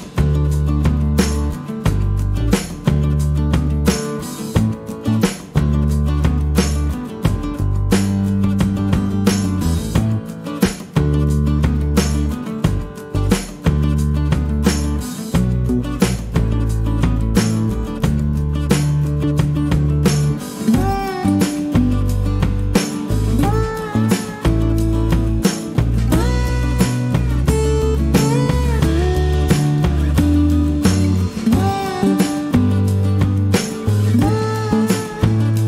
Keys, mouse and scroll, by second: 0.0 click, 1.3 click, 2.1 click, 2.6 click, 3.0 click, 4.3-5.9 drag, 6.5 middle click, 6.7 click, 7.8 -, 8.6 middle click, 8.7 click, 9.6 click, 12.1 middle click, 14.4 click, 18.9 click, 22.0 click, 24.0 click, 25.5 click, 26.1 click, 26.6 click, 27.1 click, 28.0-28.6 scroll down 1, 29.2 middle click, 30.6 click, 32.8 click, 33.2 scroll down 2.